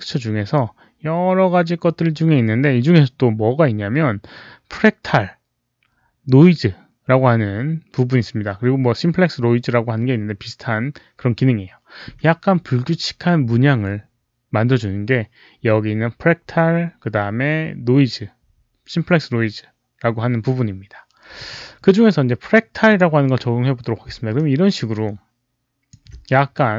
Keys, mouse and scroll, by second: 3.4 click, 22.8 click, 24.3-25.8 alt+drag, 26.6 alt+click.